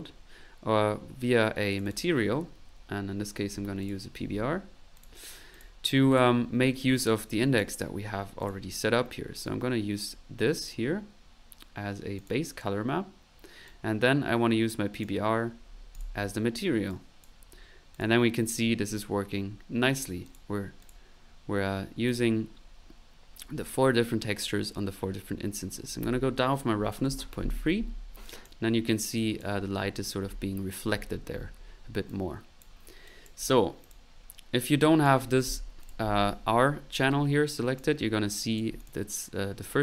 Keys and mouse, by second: 1.7 click, 1.8-3.4 typing, 3.8 click, 5.0 click, 5.5 click, 6.1 click, 7.4 click, 9.3 click, 13.6-15.3 drag, 16.9 click, 17.9 click, 20.2 click, 20.8 click, 22.0 click, 25.7 click, 28.2 click, 29.2 click, 32.1 click, 33.0 click, 33.8 click, 34.8 click, 37.4-38.2 typing, 37.5 click, 38.3 click, 38.8 click.